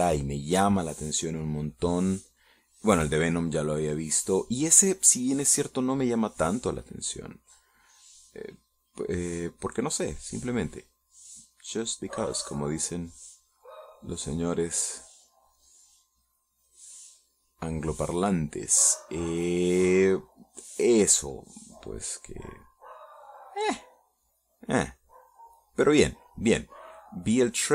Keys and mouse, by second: 2.3-4.4 drag, 6.4 middle click, 7.4-10.8 drag, 10.9 middle click, 11.6 click, 12.9-15.2 drag, 16.0 middle click, 16.7 middle click, 17.5 click, 21.9-23.4 drag, 23.9 click, 25.4-27.7 drag.